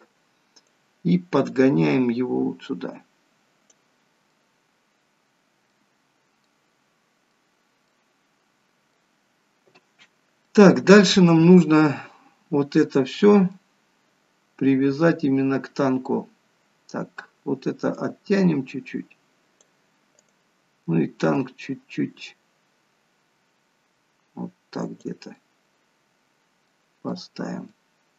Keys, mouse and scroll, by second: 0.8 click, 4.3 middle click, 6.0 scroll up 3, 6.4 middle click, 7.9 middle click, 16.3 scroll down 1, 17.9 click, 20.2 click, 25.4 middle click.